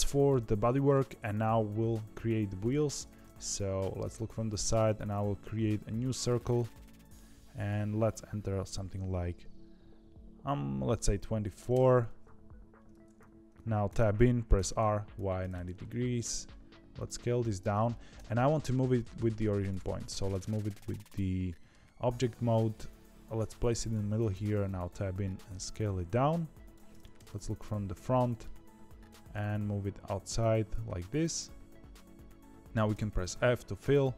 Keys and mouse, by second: 0.5 shift+middle click, 3.7 KP_3, 4.6 shift+a, 7.5-12.1 drag, 13.8 Tab, 14.5 r, 16.1 s, 17.5 Tab, 18.1 g, 19.9 shift+middle click, 20.8 shift+middle click, 22.2 g, 24.3 Tab, 24.8 s, 27.1 KP_1, 28.0 shift+middle click, 29.0 g, 32.6 middle click.